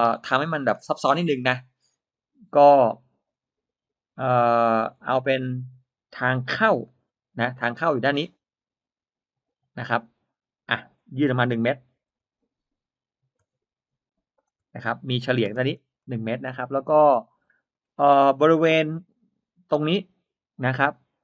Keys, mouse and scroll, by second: 0.5-0.8 scroll up 2, 4.8-5.2 scroll down 1, 5.5 scroll up 1, 6.7 middle click, 7.6-8.0 scroll up 1, 8.0 l, 9.7 click, 11.8 1, 12.0 Return, 14.2 shift+click, 15.4 space, 15.6 scroll down 1, 16.0 middle click, 16.0-16.7 scroll up 2, 16.7 scroll, 17.3 middle click, 17.6-17.9 scroll down 2, 19.8 l.